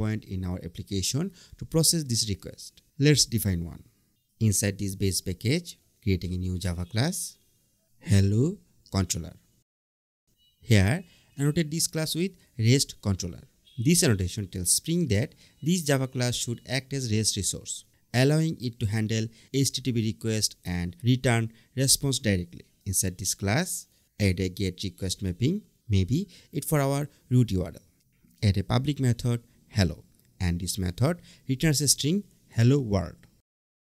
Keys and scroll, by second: 5.9 super+n, 7.1 Return, 9.2 Return, 10.0 super+1, 11.0 Up, 11.3 Return, 13.6 Return, 22.0 Return, 25.5 Return, 27.9 Right, 28.0 Return, 29.6 Tab, 30.2 Return, 32.3 Tab.